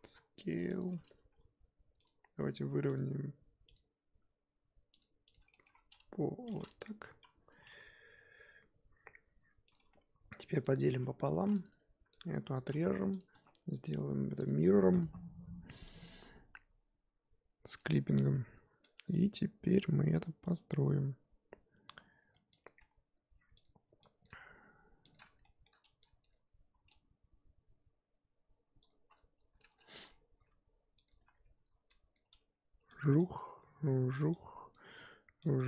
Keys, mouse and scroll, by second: 0.0 s, 0.8 Tab, 1.1 g, 5.2 click, 5.5 shift+middle drag, 5.7-6.4 scroll up 2, 6.5 g, 7.5 g, 10.5 click, 10.9 Tab, 11.3 ctrl+r, 12.4 click, 13.2 x, 13.3 Tab, 15.9-17.9 drag, 18.2 Tab, 19.1 click, 19.3-19.7 scroll up 3, 22.3 click, 22.6 click, 22.8 g, 24.2 click, 24.3 g, 25.4 shift+middle click, 26.3 click, 26.7 e, 29.9 ctrl+r, 32.1 click, 32.3 g, 33.3 click, 33.4 g, 34.7 click, 34.9 g.